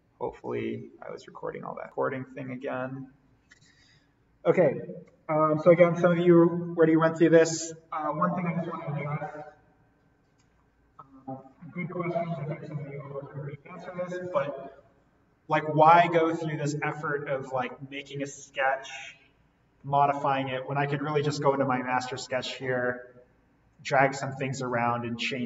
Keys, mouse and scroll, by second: 0.4 click, 15.6-16.2 scroll up 1, 16.2-16.9 scroll down 1, 16.9-20.2 middle drag, 21.1 right click, 22.2-25.4 drag.